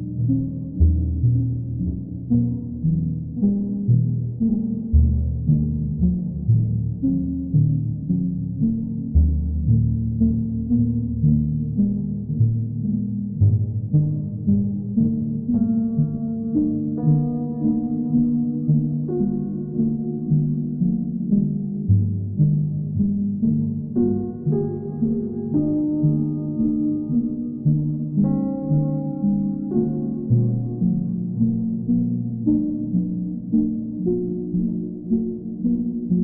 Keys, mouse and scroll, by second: 0.3 click, 1.7 click, 2.7 alt+click, 4.0 click, 4.6 click, 4.9 shift+click, 5.7 shift+click, 5.8 alt+click, 6.5 click, 8.6 click, 8.9 shift+click, 9.8 alt+click, 10.4 click, 10.8 alt+click, 13.0 click, 13.4 shift+click, 15.6 shift+click, 15.9 alt+click, 16.3 ctrl+click, 18.2 ctrl+click, 20.6 ctrl+click, 21.0 click, 21.3 alt+click, 21.6 alt+click, 23.5 ctrl+click, 25.5-26.5 right drag, 26.6-27.6 drag, 29.7-30.8 drag, 31.1-32.3 drag.